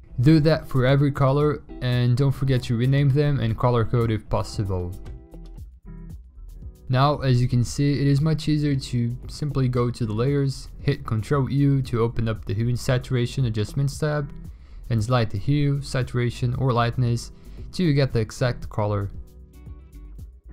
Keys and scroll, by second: 0.4 ctrl+x, 0.9 ctrl+shift+v, 1.9 v, 9.5 ctrl+u.